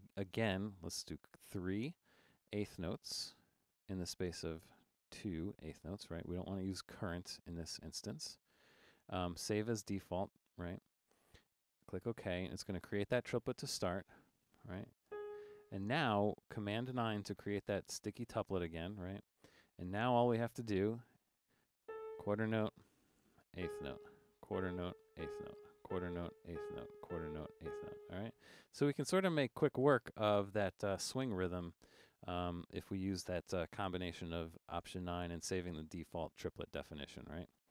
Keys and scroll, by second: 1.1 3, 5.3 2, 14.4-15.5 typing, 16.9 super+9, 20.3 5, 21.6-28.4 typing, 29.8 super+9.